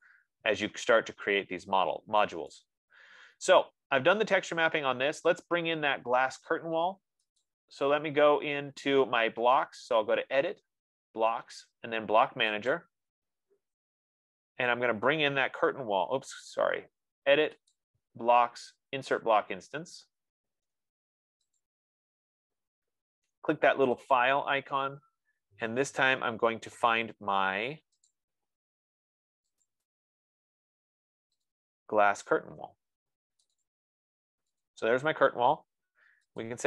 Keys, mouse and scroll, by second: 2.8 right click, 3.6-7.9 middle drag, 7.9-12.9 drag, 13.3-17.9 drag, 22.4 click, 23.4 F15, 24.6 click, 28.6 click, 30.0 click, 31.8 click, 32.1 click, 33.9 click, 34.2 click, 35.1 click.